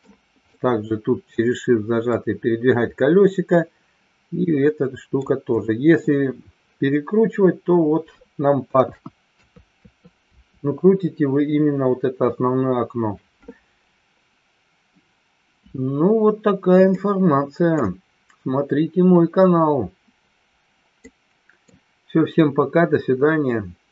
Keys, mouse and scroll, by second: 0.5-2.1 shift+middle drag, 3.6-5.3 shift+middle drag, 8.7 KP_1, 9.3 KP_3, 9.8 KP_4, 10.3 KP_5, 17.0-18.0 middle drag, 21.1-21.6 middle drag.